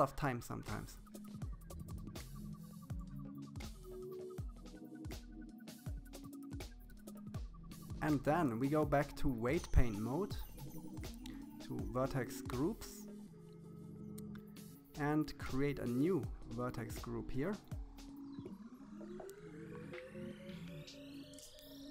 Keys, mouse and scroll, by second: 1.3-2.7 drag, 3.1 click, 3.4 click, 3.6 click, 3.8 KP_1, 3.9 shift+middle click, 4.2 click, 4.5 click, 4.7 shift+middle click, 5.0 KP_7, 5.4 click, 5.7 click, 6.0 middle click, 6.1 scroll down 4, 6.2 middle click, 6.6 shift+middle click, 6.7 click, 7.9-9.0 drag, 10.6 click, 13.4-14.4 scroll up 5, 14.4-16.1 drag, 17.6 click, 18.4 click, 19.9 click.